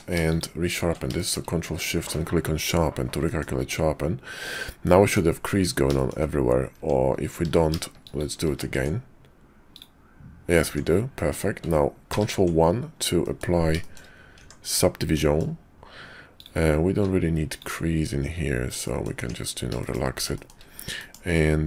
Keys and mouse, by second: 1.1 shift+click, 3.2 click, 3.6 Tab, 4.8 click, 5.9 shift+click, 6.7 Tab, 7.4 q, 8.7 Tab, 9.7 click, 10.6 Tab, 11.1 click, 12.1 ctrl+1, 13.2 click, 13.9 shift+click, 14.4 Tab, 15.1 click, 16.3 click, 16.9 q, 18.8 click, 19.2 Tab, 19.8 shift+click, 20.3 shift+click, 21.0 click.